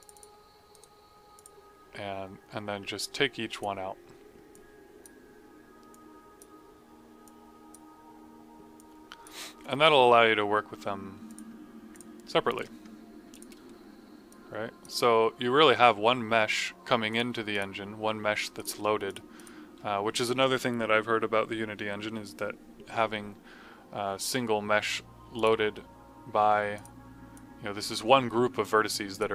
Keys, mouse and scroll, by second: 0.6 right click, 1.3 click, 12.5 Delete, 13.2 click, 25.3 click.